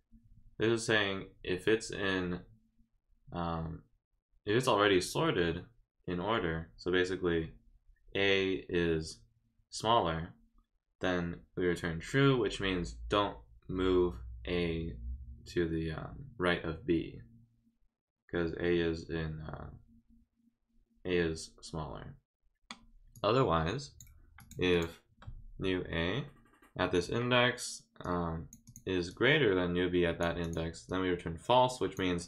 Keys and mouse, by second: 23.1 click, 24.4 click, 24.7 click, 28.0 click, 28.6 click, 29.1-30.2 drag, 30.4 click, 30.9-31.9 drag.